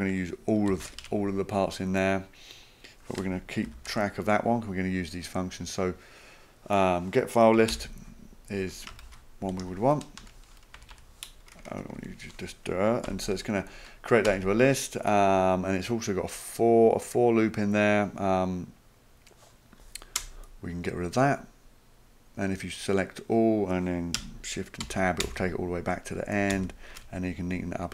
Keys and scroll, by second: 0.7 ctrl+c, 3.7 ctrl+v, 7.3-10.1 typing, 10.2 Return, 10.8 Left, 10.9 Left, 11.3-11.9 typing, 13.1 End, 14.3 Return, 20.2 BackSpace, 24.8 shift+Tab, 25.2 shift+Tab, 26.5 shift+Tab.